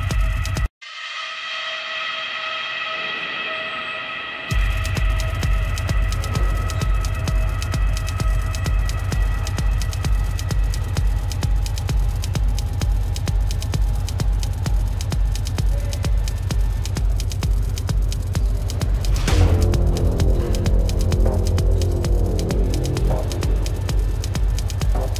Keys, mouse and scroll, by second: 0.9 ctrl+alt+z, 3.6 ctrl+alt+z, 11.2 ctrl+alt+z, 13.5 right click, 15.2 ctrl+alt+z, 15.4 ctrl+alt+z, 15.6 ctrl+alt+z.